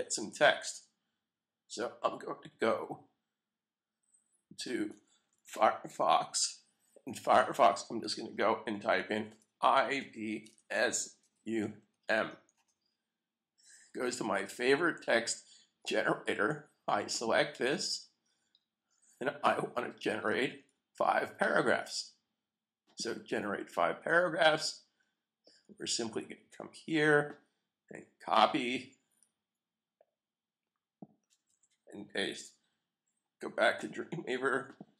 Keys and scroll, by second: 5.3 super+t, 12.5 Return, 31.4 super+c.